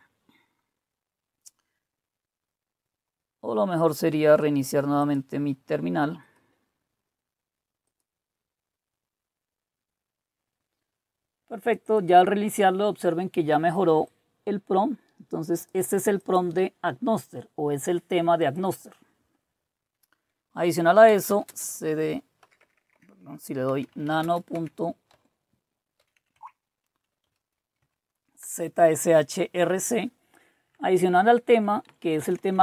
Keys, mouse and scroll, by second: 5.0 click, 6.2 click, 7.8 click, 11.6 click, 11.9 click, 14.0-15.7 drag, 16.2 click, 18.4 click, 20.8-27.7 typing, 27.8 Tab, 28.4 Return, 30.7 Down, 31.2 Down, 31.2-31.6 Down, 32.3-32.6 typing.